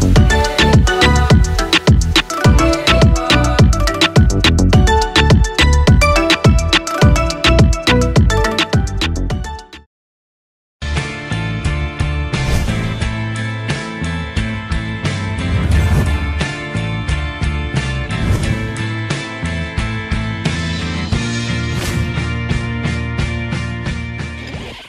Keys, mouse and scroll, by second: 5.7 click.